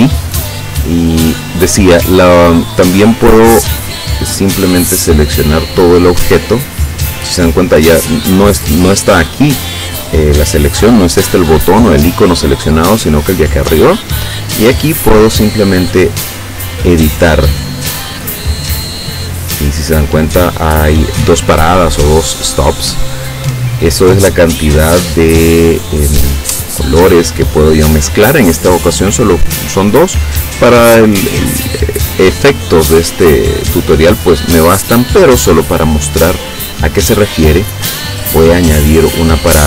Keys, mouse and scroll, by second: 5.2 click, 8.2 click, 13.5 click, 16.9 click, 17.9-18.9 drag, 19.4 click, 21.4 click, 22.7 click, 29.4 click, 30.2 click, 31.8 click, 35.9 click.